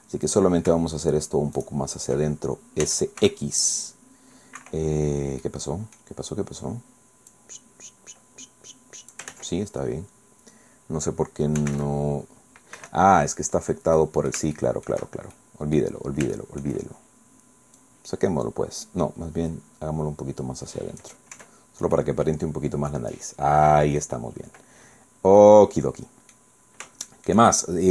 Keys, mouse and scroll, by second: 0.2 click, 1.6 shift+right click, 2.8 s, 3.2 x, 4.6 Escape, 5.2 scroll down 2, 5.4 click, 7.3-9.3 drag, 9.3 ctrl+z, 11.6 s, 11.7 x, 12.8 Escape, 13.5-13.8 scroll down 2, 14.0 click, 14.4 shift+middle click, 14.6 shift+middle click, 15.0-16.2 shift+scroll down 6, 15.4 shift+middle click, 16.4 shift+click, 17.8-21.2 drag, 21.4 Tab, 21.6 scroll down 1, 22.0-24.2 drag, 24.9-25.2 scroll down 1, 25.4-26.5 drag, 26.6 scroll up 1, 27.0 shift+middle click, 27.5 shift+scroll down 1.